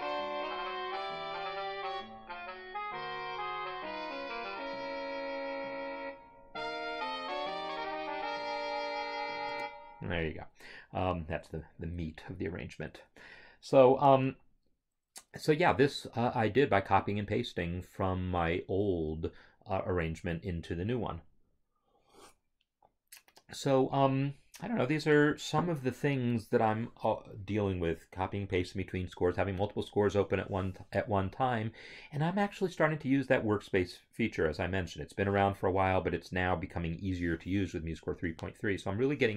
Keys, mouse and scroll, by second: 9.6 space.